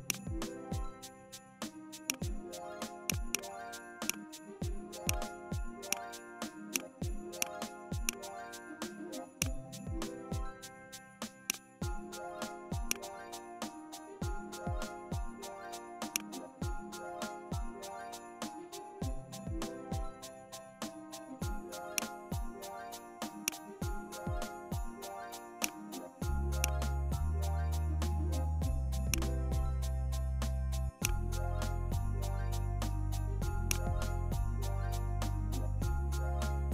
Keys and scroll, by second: 34.1 Up.